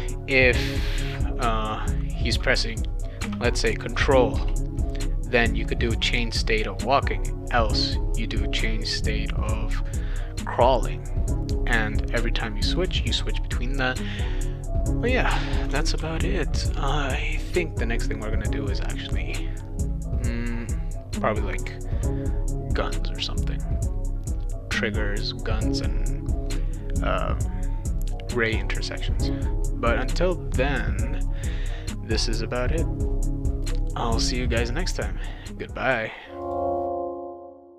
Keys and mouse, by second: 3.2 space, 4.3 BackSpace, 16.0 ctrl+s.